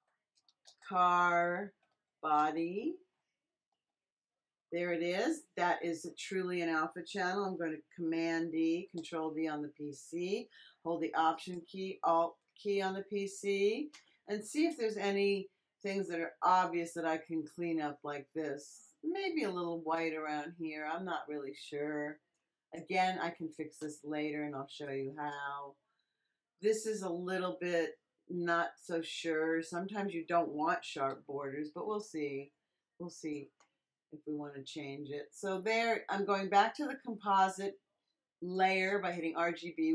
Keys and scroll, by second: 0.0-3.1 typing, 3.7 Return, 8.9 super+d, 31.0 x.